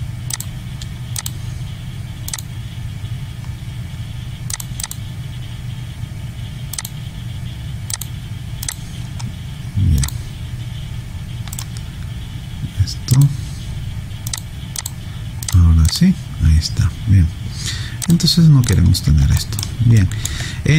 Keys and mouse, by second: 11.6 right click, 13.1 click, 18.4 click, 19.4 alt+right click, 20.0 alt+middle click.